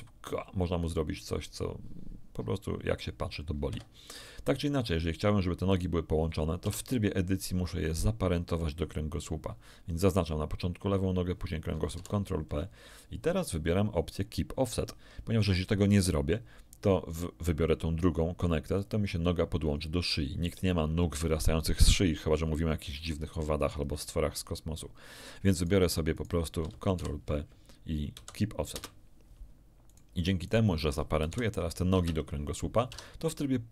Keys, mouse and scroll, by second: 3.6 Escape, 5.6 right click, 6.6 Tab, 7.8 shift+right click, 11.9 ctrl+p, 18.7 click, 22.9 ctrl+z, 25.5 right click, 26.1 shift+right click, 26.9 ctrl+shift+p, 28.1 Down, 28.7 Return, 29.8 right click, 30.4 shift+right click, 31.2 ctrl+shift+p, 31.9 Return, 32.8 Tab.